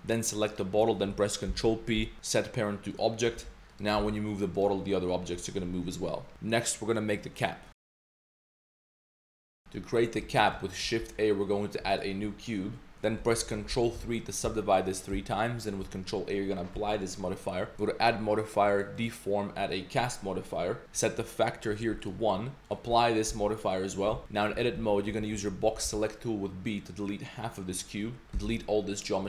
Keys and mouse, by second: 0.5 shift+click, 1.5 ctrl+p, 3.4 a, 3.7 drag, 4.0 g, 5.4 middle click, 9.8 middle click, 10.2 middle drag, 12.0 shift+a, 12.9 middle click, 13.7 ctrl+3, 15.0 click, 16.7 ctrl+a, 17.7-20.0 drag, 21.2 click, 22.6 click, 23.3 ctrl+a, 24.1 Tab, 24.2 middle click, 24.6-25.8 typing, 28.3 x.